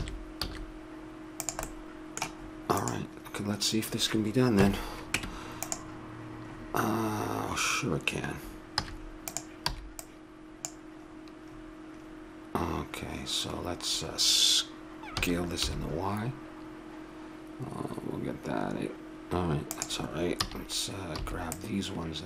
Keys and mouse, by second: 0.0 s, 1.7-2.8 middle drag, 2.8 right click, 4.6 KP_3, 5.1 Tab, 6.5 middle click, 8.8 z, 9.7 b, 13.0-15.1 middle drag, 15.1 s, 20.4 a, 21.2 b.